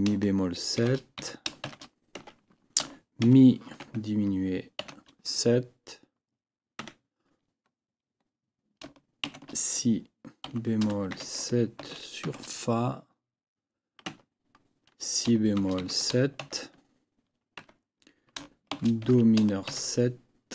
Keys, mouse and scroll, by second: 0.8 shift+e, 1.2 shift+b, 2.1 shift+Tab, 3.2 shift+e, 3.8 shift+0, 6.8 Tab, 9.2 shift+b, 10.5 b, 12.2 shift+f, 14.1 Tab, 15.6 shift+b, 17.6 Tab, 18.7 shift+c, 19.0 shift+m.